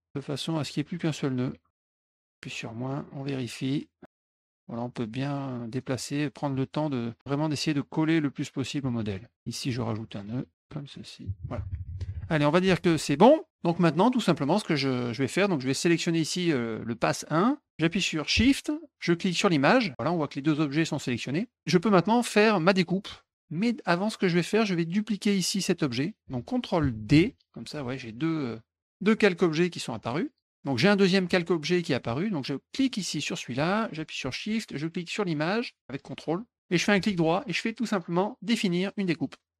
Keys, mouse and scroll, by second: 1.8 click, 2.9 middle click, 4.1 middle click, 4.1 middle click, 4.7-5.8 drag, 6.6 click, 8.1 click, 8.8 middle click, 10.1 click, 10.3 click, 10.5 click, 12.9 middle click, 19.3 shift+click, 21.3 middle drag, 23.5 click, 23.9 middle click, 25.2 click, 28.2 click, 28.9 click, 29.9 click, 30.7 click, 32.7 click, 35.1 shift+click, 35.9 ctrl+click, 36.7 right click, 39.2 click.